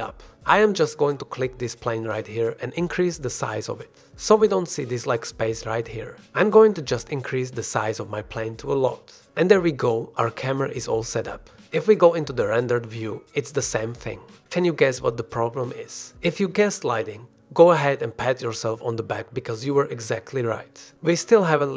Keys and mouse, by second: 3.4 s, 6.7 ctrl+s, 7.5 click, 8.1 ctrl+s.